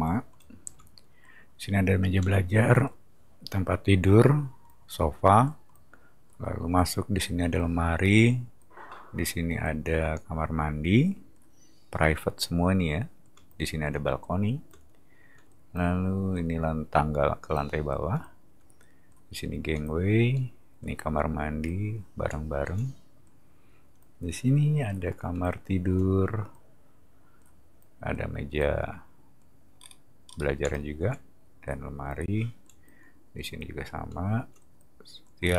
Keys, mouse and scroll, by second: 29.8 middle click, 30.2 middle click, 35.4-35.5 scroll down 4.